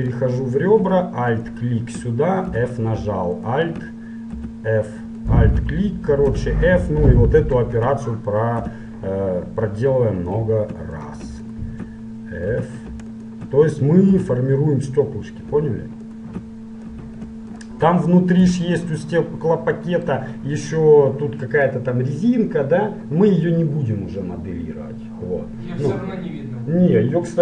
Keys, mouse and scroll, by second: 1.4-3.2 right drag, 2.6 f, 3.6-5.4 right drag, 4.5 f, 5.4-7.2 right drag, 6.4 f, 7.5-9.3 right drag, 8.6 f, 11.0-15.2 right drag, 12.6 f, 14.2 f, 16.0-19.1 right drag, 16.9 f, 18.4 f, 19.1-21.0 middle drag.